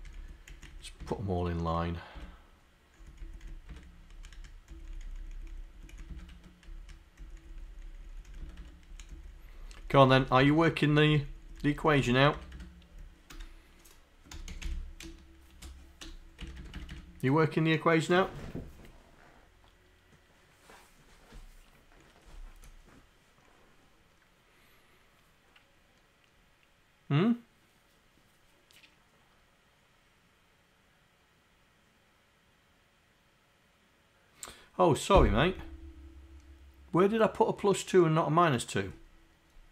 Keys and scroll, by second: 0.0 Up, 0.2 Left, 0.6 Down, 1.0 Tab, 3.3 Left, 3.7 Tab, 4.4 Up, 4.7 Down, 4.9 Down, 5.6 Down, 6.3 Tab, 6.8 Up, 7.4 Down, 8.5 Tab, 9.0 Up, 9.2 Down, 9.5 Down, 10.3 Down, 10.5 Tab, 10.9 Up, 11.1 Down, 12.1 Down, 12.4 Tab, 13.3 Return, 14.3 r, 15.1 space, 16.6 Tab.